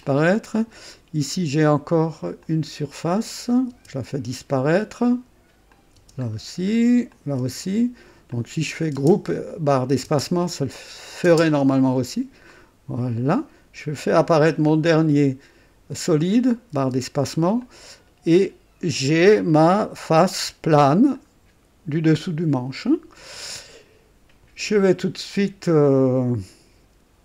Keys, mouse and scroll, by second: 0.0 click, 0.9 right click, 2.4 click, 3.7 space, 5.7 click, 6.0 space, 6.3 scroll down 1, 7.1 click, 7.4 space, 7.4 space, 8.3 click, 8.9 space, 9.0 space, 10.0 space, 11.2 space, 12.5 click, 14.6 click, 16.7 space, 17.6-19.6 drag, 20.4 right click, 21.1-22.8 drag, 25.8 click.